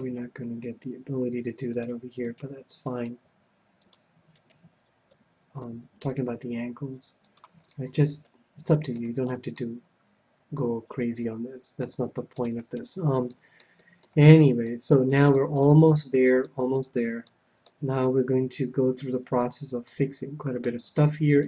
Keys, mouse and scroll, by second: 0.2 g, 1.8-3.2 drag, 2.3 right click, 3.2 g, 3.6 right click, 5.1 KP_1, 5.2 click, 5.2 right click, 6.1 g, 7.3-9.0 drag, 7.7-11.1 middle drag, 9.4 a, 12.4 KP_1, 12.8-19.1 middle drag, 19.4-21.0 drag, 19.8-21.4 middle drag.